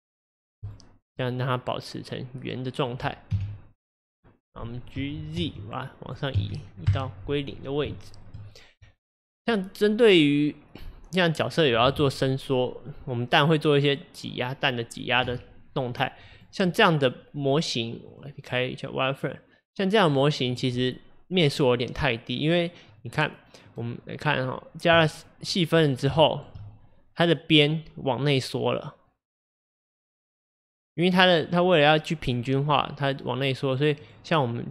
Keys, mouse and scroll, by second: 0.1-1.2 right drag, 1.2-3.3 middle drag, 3.3 KP_1, 5.0 g, 8.0-11.1 shift+middle drag, 15.3-15.9 scroll up 1, 15.9-16.3 scroll down 1, 16.4 drag, 16.7 click, 18.1-20.2 drag, 20.6 drag, 22.9 click, 23.7-25.8 drag, 25.8-26.2 scroll up 5, 26.2-26.6 shift+middle drag, 26.6-29.3 scroll up 3, 29.3 click, 30.3 click, 31.4 click, 32.3 click, 34.1-34.7 drag.